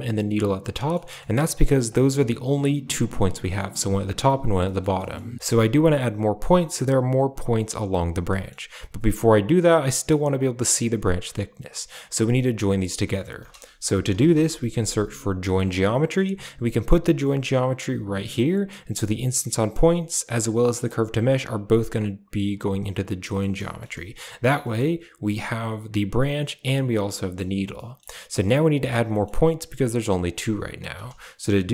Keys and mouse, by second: 0.6 middle click, 0.9 middle click, 1.3 middle click, 1.7 click, 1.9 g, 4.5 middle click, 4.9 middle click, 5.3 a, 8.2 middle click, 9.5 click, 9.6 click, 13.3 shift+a, 18.3 click, 20.8-21.6 drag, 21.8 click, 23.2 middle click, 23.6 shift+middle click, 24.3 a, 27.0 shift+middle drag, 27.6 middle click, 28.2 middle click, 29.0 middle click, 30.8 shift+a.